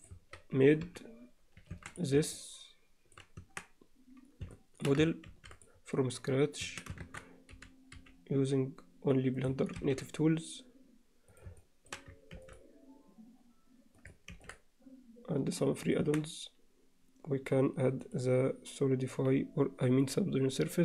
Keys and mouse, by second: 0.0 click, 0.9 KP_Divide, 1.8 alt+a, 2.4-3.2 middle drag, 3.4 Tab, 4.5 alt+middle click, 5.3 ctrl+r, 7.1 shift+Tab, 7.5 g, 9.8 ctrl+r, 11.6 alt+middle click, 16.0 Tab, 18.1-20.1 drag.